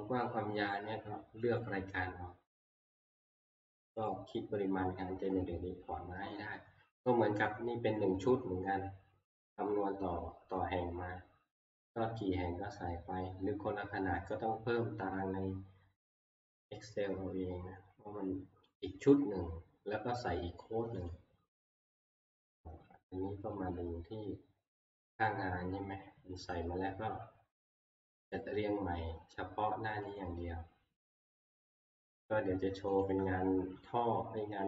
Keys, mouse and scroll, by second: 1.6 click, 4.1 click, 11.1 scroll, 12.8-15.2 scroll, 18.9 click, 21.1 click, 24.9 click, 28.3 click, 30.2 click, 31.3 click, 33.0 click.